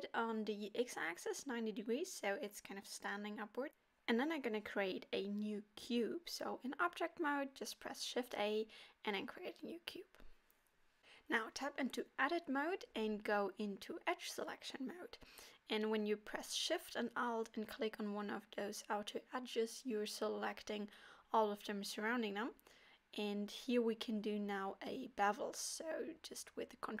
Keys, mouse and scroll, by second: 0.4 middle click, 1.1 right click, 2.1 middle click, 2.7-3.1 scroll up 2, 3.1 shift+middle click, 7.3 shift+a, 9.5 scroll down 3, 9.8 middle click, 10.6 Tab, 11.0 middle click, 12.1 click, 12.7 click, 15.2 click, 15.5 middle click, 16.6 alt+click, 18.0 alt+shift+click, 18.8 middle click, 21.1 ctrl+alt+click, 21.9 middle click, 25.1 ctrl+b.